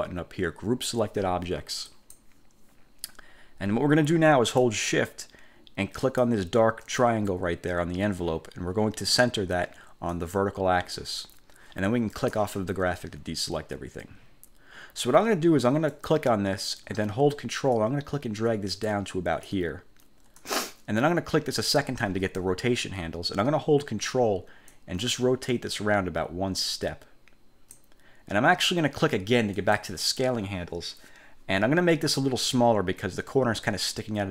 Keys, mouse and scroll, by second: 2.0 click, 6.2 shift+click, 10.3 click, 12.3 click, 16.1 click, 17.9 ctrl+click, 20.5 click, 24.8-28.1 ctrl+drag, 29.7 click.